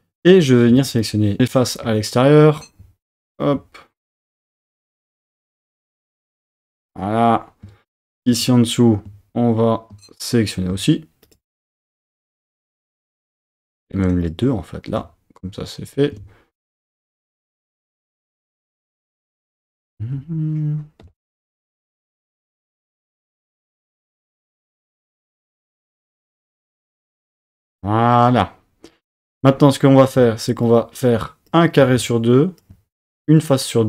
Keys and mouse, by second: 1.4 alt+shift+super+z, 8.1 shift+click, 18.4 shift+click, 19.1 shift+click, 19.8 shift+click, 21.4 shift+click, 23.0 shift+click, 24.1 shift+click, 25.8 shift+click, 26.6 shift+click, 27.4 shift+click, 30.7 shift+click.